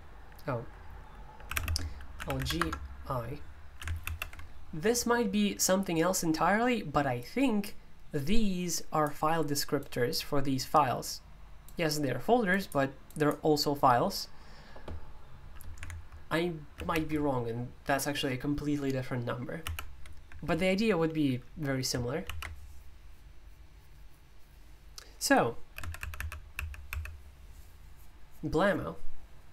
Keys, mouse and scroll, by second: 1.5-2.8 typing, 8.2-15.8 drag, 22.3 alt+d, 25.8 Escape, 26.0-26.9 typing.